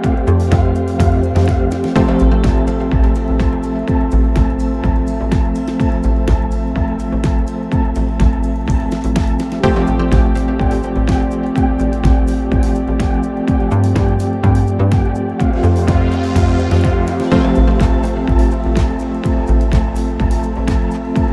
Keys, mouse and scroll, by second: 0.2-2.7 middle drag, 2.7-3.8 scroll down 11, 3.8-6.9 middle drag, 8.7 click, 9.7-10.5 scroll down 4, 10.5-11.2 scroll up 5, 11.2 scroll up 1, 12.7 drag, 14.0 click, 14.8-15.7 scroll down 6, 15.7 drag, 17.2-21.3 drag.